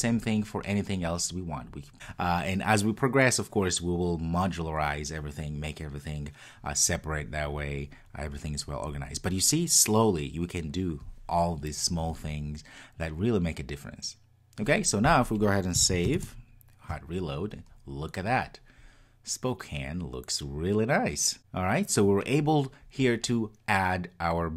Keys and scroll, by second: 15.9 super+s.